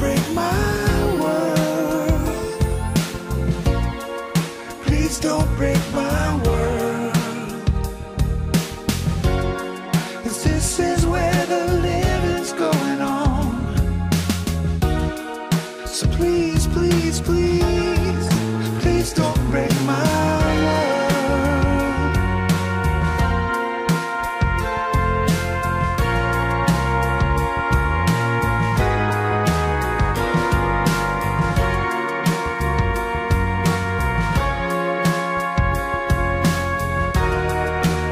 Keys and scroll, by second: 1.4 Return, 5.6 Tab, 7.3 Tab, 8.4 alt+shift+Page_Up, 14.1 Tab, 19.4 Escape, 19.8 alt+Return, 21.6 Return, 22.0 Return.